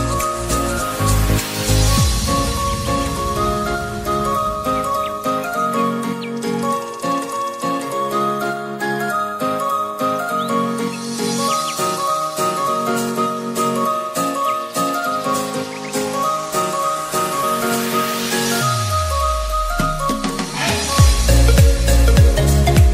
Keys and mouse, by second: 0.4 click, 3.1-12.9 drag, 12.9-22.9 alt+drag.